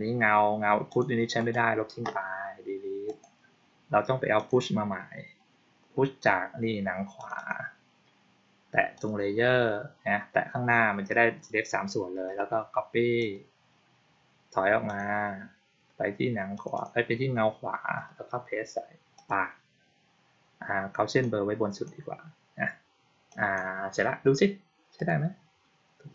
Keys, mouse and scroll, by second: 0.8 click, 1.3 right click, 3.0 click, 4.3 click, 7.1 click, 7.3 click, 8.9 click, 13.1 click, 14.8 click, 16.5 click, 16.7 click, 19.1 click, 21.1-21.8 drag, 23.2 click, 24.9 click.